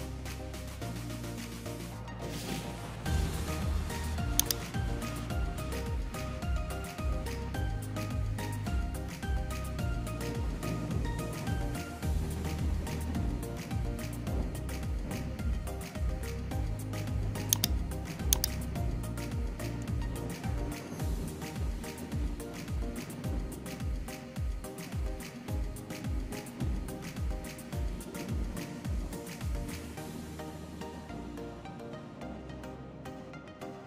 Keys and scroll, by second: 4.3 ctrl+c, 4.5 ctrl+v, 24.5 alt+Tab, 30.4 alt+Tab.